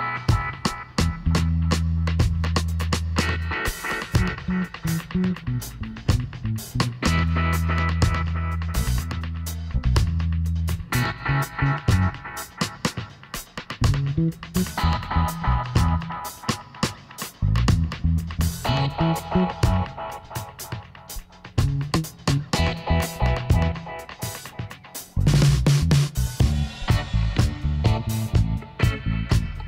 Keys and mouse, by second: 3.9-8.6 middle drag, 5.1 Tab, 6.2 a, 8.0 Tab, 8.4 a, 8.6 a, 9.4 w, 11.5 Tab, 12.5 Tab, 12.9-14.6 right drag, 14.4 ctrl+r, 14.6 click, 18.7-23.5 middle drag, 20.3 ctrl+r, 23.6-29.6 middle drag, 28.7 Tab.